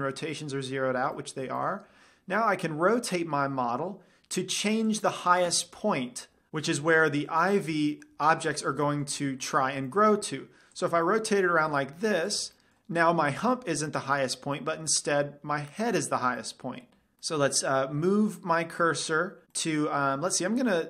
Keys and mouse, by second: 1.6-2.8 middle drag, 3.1 r, 5.5-6.5 drag, 7.1 g, 8.0 g, 8.2-10.0 drag, 8.4-10.4 middle drag, 10.5 r, 11.3-14.9 drag, 12.1 g, 15.1-15.9 middle drag, 19.4 middle drag, 20.1-20.8 middle drag.